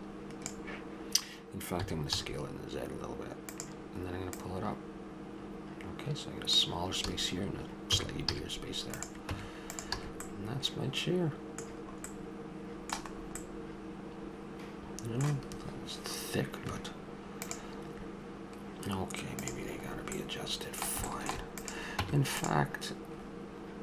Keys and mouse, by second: 4.3-6.2 drag, 7.9 a, 8.3 z, 9.3 Tab, 10.0 a, 15.0 middle click, 21.1 middle click, 22.0 Tab.